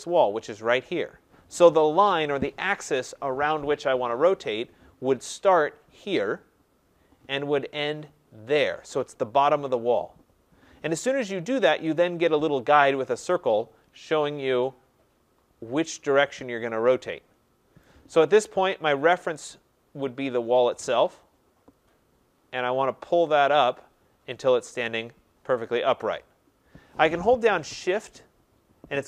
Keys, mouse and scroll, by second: 6.1 click, 8.6 click, 17.8 right click, 21.9 click, 27.9 click.